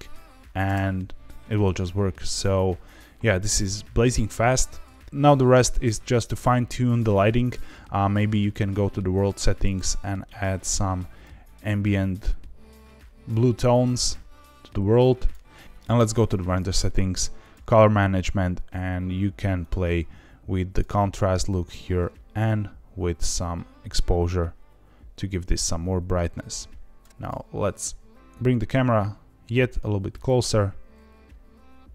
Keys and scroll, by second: 0.6 space, 8.0 r, 27.1 Escape, 27.5 g, 27.6 z, 27.8 z, 30.4 g.